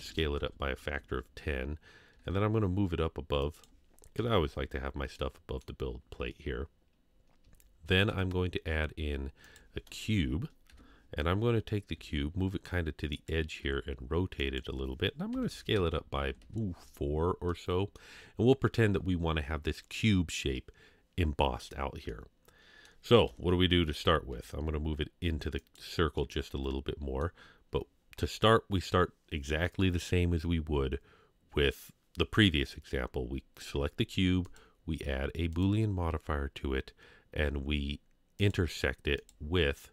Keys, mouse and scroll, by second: 0.9 KP_3, 1.5 scroll down 2, 2.1 g, 4.2 KP_1, 5.1-5.6 middle drag, 6.1 scroll up 2, 8.1 shift+a, 10.7 KP_3, 11.9 g, 13.7 r, 15.3 s, 16.4 KP_1, 17.1 scroll down 1, 17.5-18.0 middle drag, 18.2 scroll up 3, 22.1-22.8 middle drag, 23.3 KP_3, 24.3 g, 26.2-27.2 middle drag, 35.6 click, 38.4 click, 39.2 click.